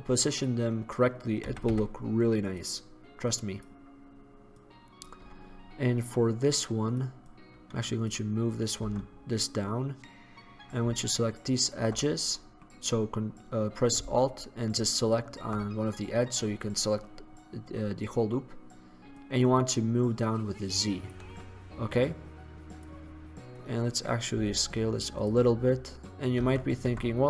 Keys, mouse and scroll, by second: 0.9-2.2 drag, 1.5 s, 3.6 click, 5.5-8.2 drag, 9.0 Tab, 12.5-17.3 middle drag, 19.3-20.7 drag, 22.8 middle click, 23.7 right click, 24.5 s, 25.3 click, 25.7 click, 26.6 Tab, 27.0 Tab, 27.1 click.